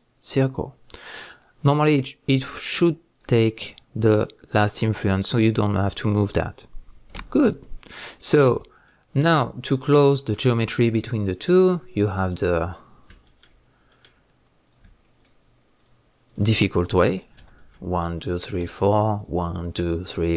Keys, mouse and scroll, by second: 3.1 drag, 6.0 click, 6.6-12.5 middle drag, 12.5 click, 12.9 scroll up 1, 13.2-14.7 shift+middle drag, 13.6-13.9 scroll up 1, 15.2 shift+click, 15.8 shift+drag, 16.3 shift+click, 17.3 f, 17.6-18.4 middle drag, 18.4 click, 19.2 shift+drag, 19.8 shift+click, 20.3 shift+click.